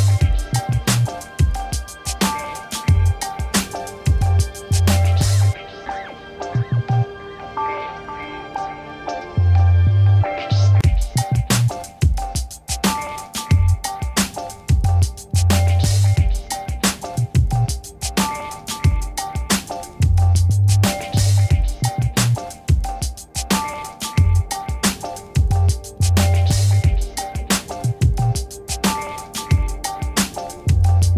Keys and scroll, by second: 8.2 m, 11.6 ctrl++, 12.2 space, 15.2 v, 18.1 ctrl+d, 18.7 ctrl+-, 20.1 ctrl+a, 20.8 v, 22.6 ctrl+d, 25.0 ctrl+-, 28.5 ctrl+t.